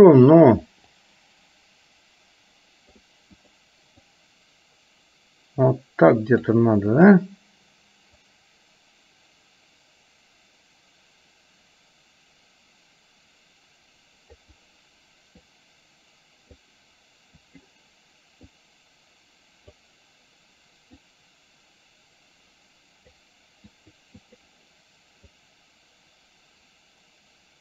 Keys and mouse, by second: 1.1-3.1 drag, 3.4 click, 4.3-6.7 drag, 7.1 click, 8.3-14.6 drag, 15.7-16.7 drag, 17.4 click, 18.7-19.9 drag, 21.1-23.2 drag, 23.9 click, 24.3 click, 25.6-27.6 drag.